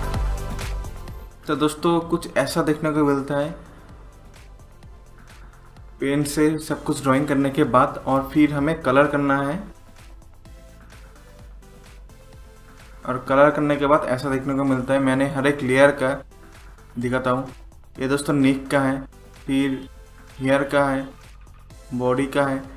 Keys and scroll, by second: 0.3 ctrl+0.